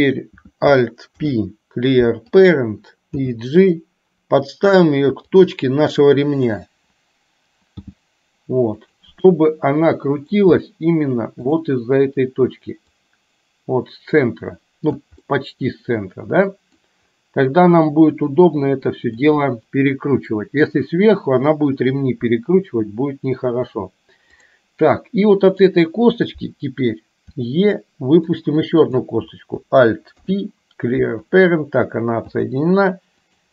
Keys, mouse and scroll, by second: 1.2 alt+p, 3.2 g, 6.6 click, 7.9 g, 9.4-10.4 middle drag, 11.6 click, 13.0-15.0 drag, 15.2 scroll up 1, 15.5-16.9 middle drag, 17.7-19.2 middle drag, 19.2 scroll down 1, 24.4 click, 25.1 middle click, 27.4 e, 28.9 click, 30.2 alt+p, 32.4 g.